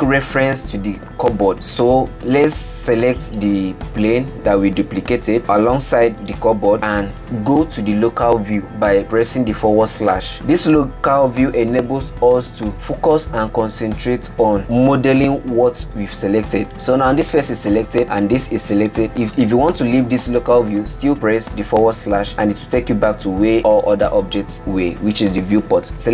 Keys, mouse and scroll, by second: 7.6 shift+click, 11.4 /, 12.3 scroll down 5, 12.7-15.0 middle drag, 18.0 click, 18.1 click, 19.3 click, 19.8 click, 22.9 /, 25.0 click, 25.9 shift+click.